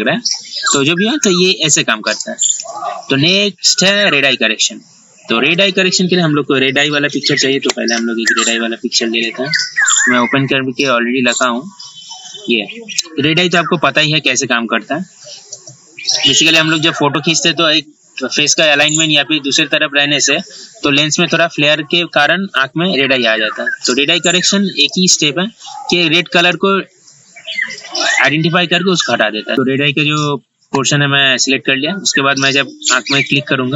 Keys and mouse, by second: 2.3 right click, 5.6 click, 7.0 ctrl+z, 7.2 ctrl+z, 7.5 ctrl+z, 7.8 ctrl+z, 8.1-9.1 typing, 11.5 click, 25.0 right click, 26.6 click, 29.5 ctrl+alt+e, 33.4 click.